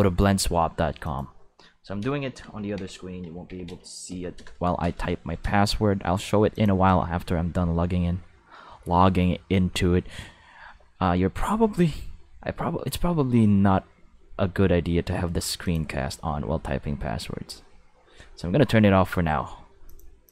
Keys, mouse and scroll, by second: 1.0 click, 2.2-4.1 typing, 4.3 Return, 6.5 click, 15.6 click, 19.9 click.